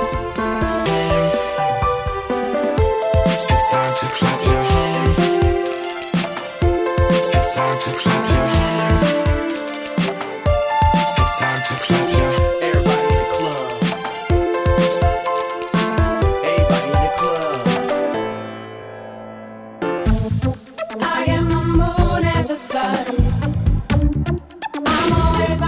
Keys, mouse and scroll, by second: 3.7 click, 4.6 Delete, 4.9-5.3 scroll up 2, 5.9-7.3 scroll up 3, 9.7 click, 10.7 drag, 11.7 click, 11.9-12.3 scroll down 1, 12.7 click, 13.3-14.9 drag, 17.9 click, 18.6 Delete, 20.2-20.9 drag, 21.9-22.3 scroll down 1, 24.4-25.6 drag.